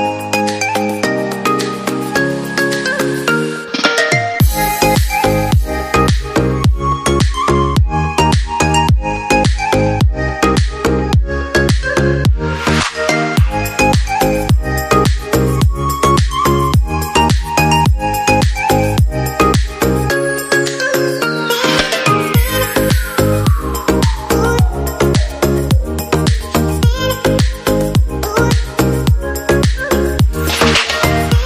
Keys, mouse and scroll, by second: 13.3 ctrl+Down.